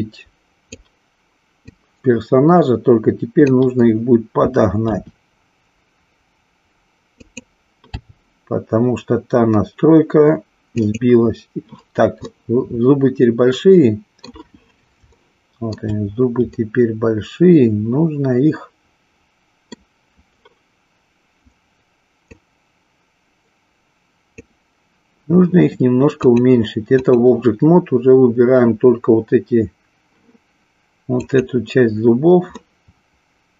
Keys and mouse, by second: 1.6-3.3 drag, 4.9 r, 7.3 click, 8.0 g, 11.0 click, 12.3-14.2 middle drag, 15.2-15.8 shift+middle drag, 16.6-19.7 middle drag, 22.2-24.5 drag, 26.2 click, 31.2 click, 32.5-33.5 middle drag.